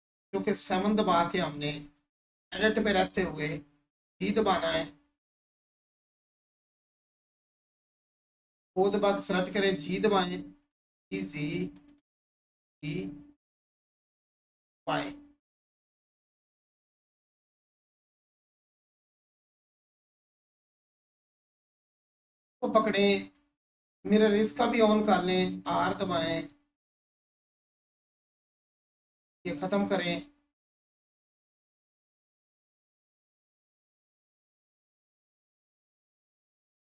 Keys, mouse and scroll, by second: 0.6 7, 1.7 Tab, 2.6-4.4 drag, 4.4-6.0 scroll up 1, 6.0 right click, 6.7 scroll up 1, 9.6-11.5 scroll up 1, 11.8 right click, 15.7-17.5 scroll down 1, 19.0-20.0 scroll up 1, 20.3-24.5 drag, 26.1 right click, 26.5-28.3 drag, 28.3 right click, 29.6-32.2 drag, 32.2 right click, 32.5-35.8 drag, 35.8 right click, 36.3-36.9 drag.